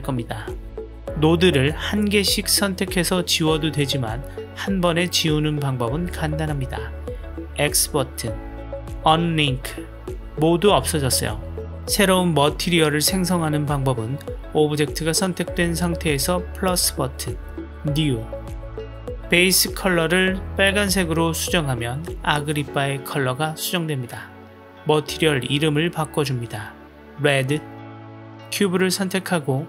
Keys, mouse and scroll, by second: 1.7-2.6 drag, 2.7 Delete, 3.5 click, 4.0 Delete, 5.5 ctrl+z, 17.6 click, 23.7-25.5 drag, 25.5 middle click, 26.7 click.